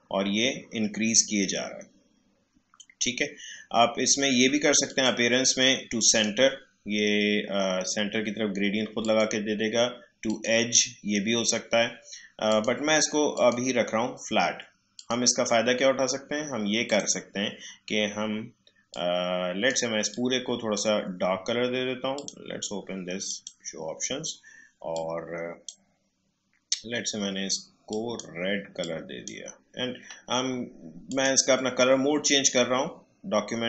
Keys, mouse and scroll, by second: 4.8 click, 9.0-31.1 drag.